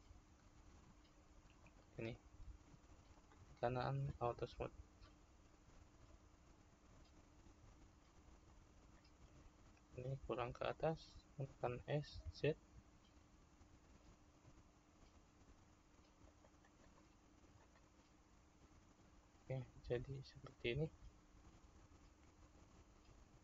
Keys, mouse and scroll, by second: 0.2 ctrl+r, 4.5 right click, 8.6-14.9 middle drag, 14.9 click, 20.8-23.4 middle drag.